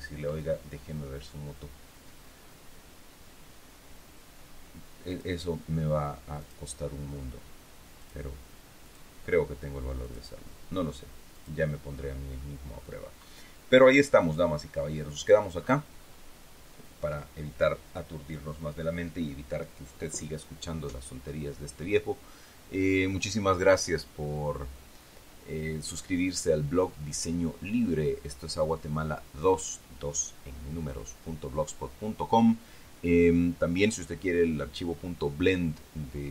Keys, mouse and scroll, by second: 3.2-3.7 scroll down 2, 5.0 click, 6.3 click, 7.9 click, 8.7 click, 9.9 click, 11.2 click, 11.9 scroll down 1, 12.3-15.4 drag, 15.5 scroll up 1.